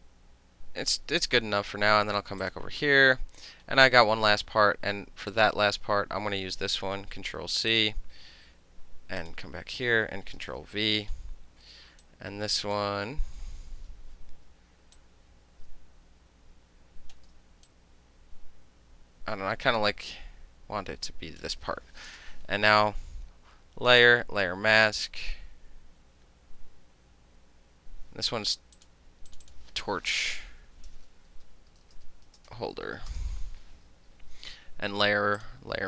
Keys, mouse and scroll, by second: 1.0 click, 1.5-2.5 middle drag, 2.5 click, 2.6-5.4 middle drag, 5.4 click, 7.2 ctrl+c, 7.8 click, 9.3 click, 10.6 ctrl+v, 12.1 click, 12.8-15.0 middle drag, 15.0 click, 15.9-17.2 shift+drag, 17.2 shift+middle click, 17.7-21.5 drag, 21.5 middle click, 22.3 KP_Enter, 24.1 click, 28.8 click, 29.4 click, 29.5 click, 30.2-33.7 typing.